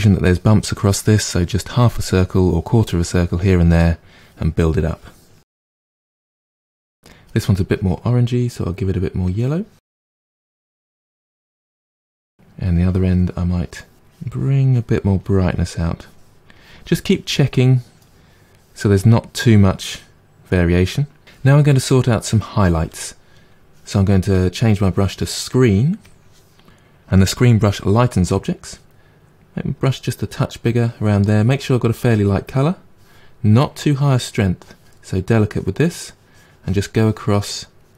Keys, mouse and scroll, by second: 4.8-5.8 drag, 5.8-8.3 middle drag, 9.2 click, 9.9 middle click, 10.2-11.8 drag, 11.8-14.0 middle drag, 14.0-17.0 drag, 17.0-21.7 middle drag, 24.3-27.3 drag, 29.7 f, 33.5-37.9 drag.